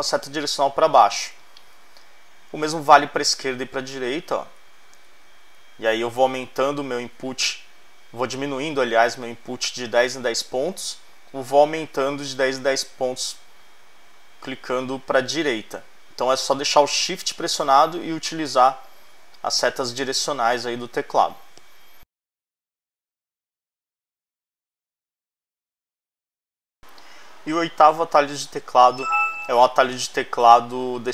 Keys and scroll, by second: 3.1 shift+Left, 9.0 shift+Left, 10.3 shift+Right.